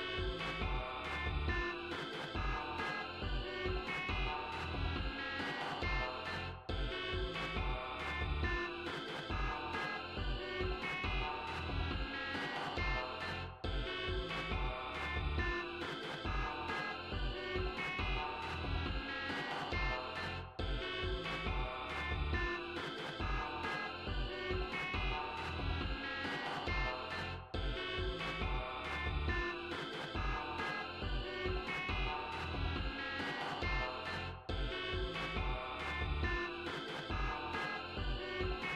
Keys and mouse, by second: 0.3 click, 1.5 click, 5.1 click, 5.7 click, 6.7 click, 7.6 click, 8.4 BackSpace, 8.8 9, 11.7 click, 16.3 click, 17.9 click, 23.8 click, 25.2 click, 26.2 right click, 27.7 click, 29.3 g, 29.7 click, 34.9 click, 36.2-38.7 drag.